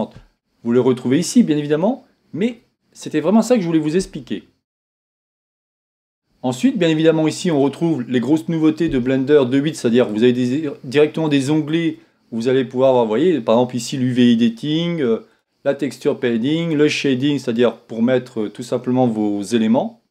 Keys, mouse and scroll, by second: 1.2-13.5 drag, 13.5 scroll up 2, 15.5-20.1 drag.